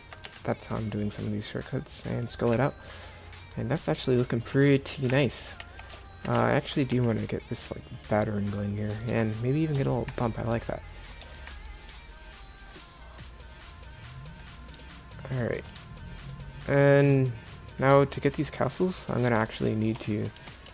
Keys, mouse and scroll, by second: 0.3 s, 2.6 Tab, 5.1 Tab, 5.6 a, 6.6 right click, 6.9 s, 9.1 Tab, 19.3 Tab, 20.4 a.